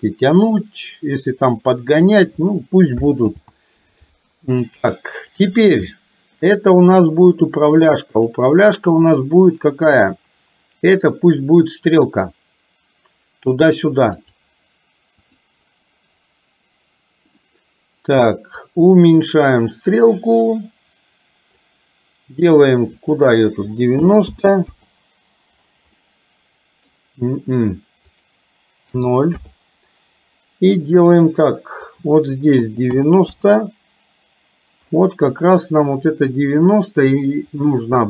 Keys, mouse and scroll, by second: 3.3 ctrl+z, 8.2-14.5 drag, 15.3 click, 18.6-21.8 drag, 26.0-27.0 middle drag, 32.0-33.5 drag, 35.0-37.3 middle drag.